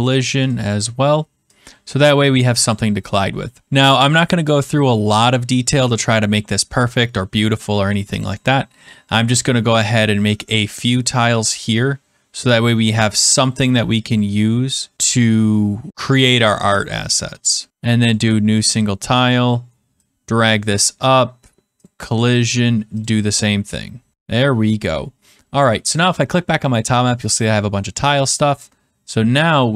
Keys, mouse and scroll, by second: 0.4 click, 2.6 click, 8.3 click, 17.7 click, 18.1 click, 20.6 click, 21.8 click, 23.0 click, 26.0 click, 28.1 middle click.